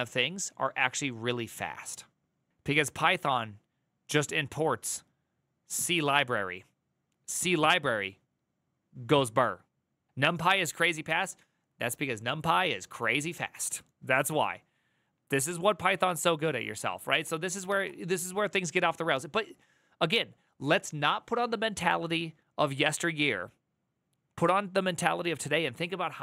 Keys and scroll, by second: 10.8 alt+[, 17.0 alt+[.